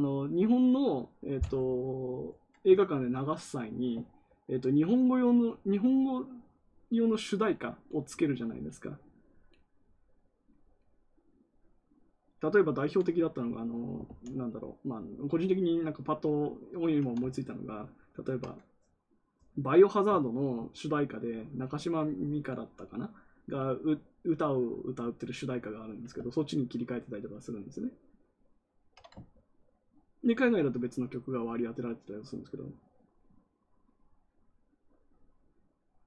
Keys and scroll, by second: 14.0 ctrl+z.